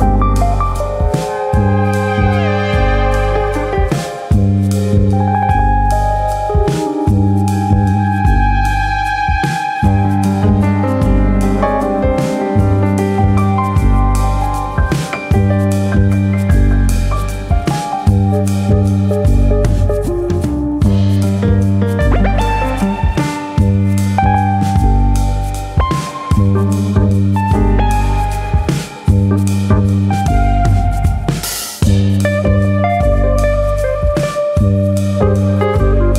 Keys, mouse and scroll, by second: 0.2 click, 1.6 click, 3.9 scroll down 3, 5.4 shift+middle click, 5.7-6.4 scroll up 1, 6.5 click, 7.3 middle click, 7.6 Tab, 7.9-8.2 scroll up 2, 8.4 click, 9.2 click, 9.4 1, 9.6 click, 10.6 ctrl+KP_Add, 11.2 middle click, 12.6 middle click, 16.5 click, 16.9 middle click, 19.1 ctrl+KP_Add, 21.1 i, 22.4 click, 23.0 KP_1, 23.7 right click, 24.8 middle click, 25.8 click, 26.5 click, 29.1 middle click, 29.8 click, 31.5 middle click, 32.2 alt+click, 32.9 KP_1, 33.9 click.